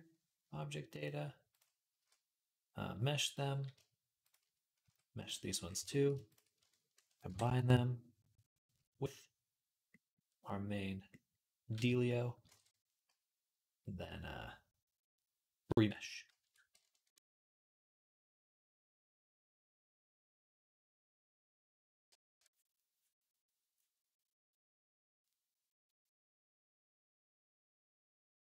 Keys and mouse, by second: 1.7 q, 4.0 shift+click, 4.1-28.4 shift+middle drag, 4.6 q, 9.0 ctrl+j, 12.3 ctrl+Tab.